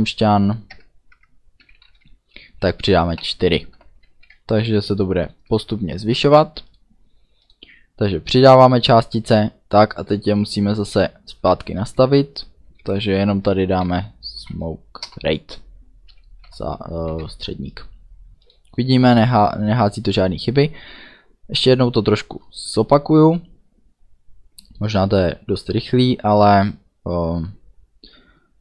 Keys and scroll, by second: 0.8 BackSpace, 1.1 KP_Add, 1.6 =, 1.8 space, 3.1 4, 3.7 ;, 4.0 ctrl+s, 13.8-15.0 typing, 15.0 Return, 16.1 End, 16.4 ;, 17.1 ctrl+s.